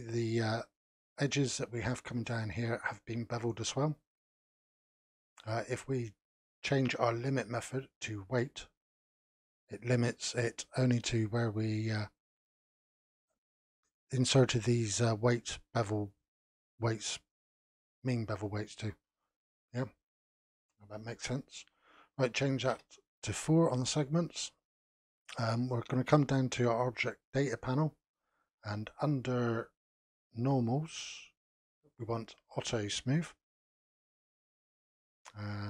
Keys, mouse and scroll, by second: 8.7 click, 12.7 click, 17.4-19.9 scroll down 1, 19.9-20.9 scroll up 1, 20.9-24.0 drag, 24.6-25.0 scroll down 3, 27.7 click, 29.0-29.4 scroll down 2, 31.0 click, 33.4 click.